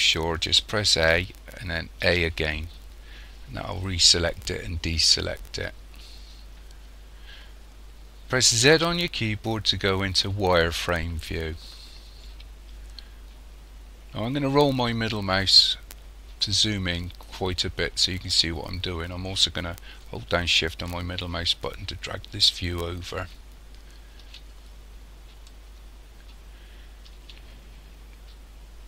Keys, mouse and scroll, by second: 0.9 a, 2.0 a, 8.7 z, 14.7-16.0 scroll up 3, 16.0-17.4 scroll up 3, 17.4-18.9 scroll up 3, 18.9-20.9 scroll up 1, 20.9 shift+middle click, 25.5 shift+middle click, 27.5-28.7 scroll up 6.